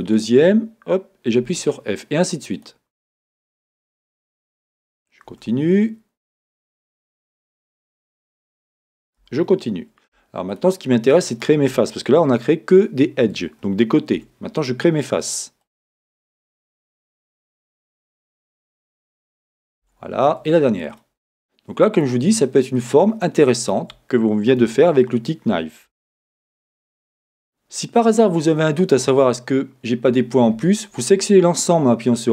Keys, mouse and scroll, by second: 0.1 shift+click, 2.5 click, 3.6 shift+click, 6.3 click, 7.9 shift+click, 9.2 f, 10.5 shift+click, 11.3 shift+click, 15.6 click, 16.9 shift+click, 17.8 shift+click, 18.9 click, 20.9 click, 21.9 shift+click, 22.8 shift+click, 25.9 Tab, 30.1 a.